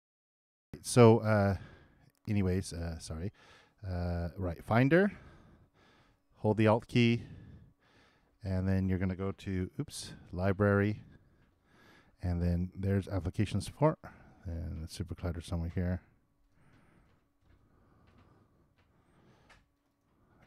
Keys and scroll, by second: 0.8 alt+..